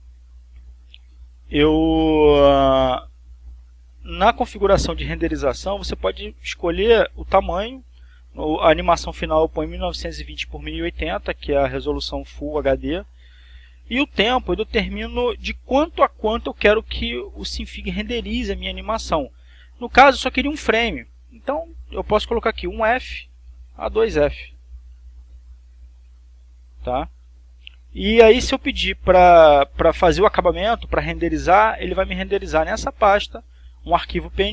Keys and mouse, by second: 0.3-1.5 drag, 3.5 click, 5.0 click, 14.0 click, 21.6-22.7 drag, 23.1 1, 23.5 f, 24.0 click, 26.1 click, 27.5 click.